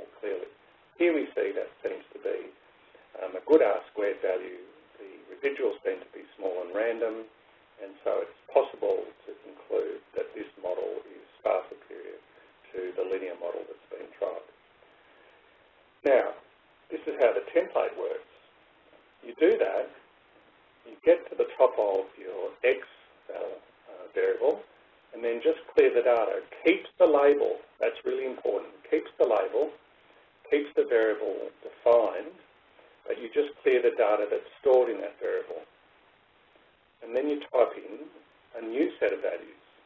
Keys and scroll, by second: 18.3 Left, 22.7 Up, 27.4 Menu, 30.9 Right, 32.2 Up, 35.9 Menu.